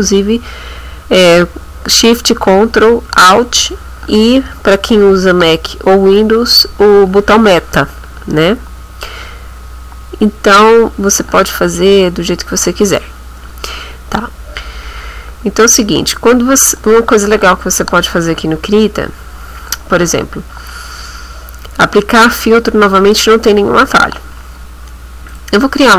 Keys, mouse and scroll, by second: 14.3 click, 25.3 click.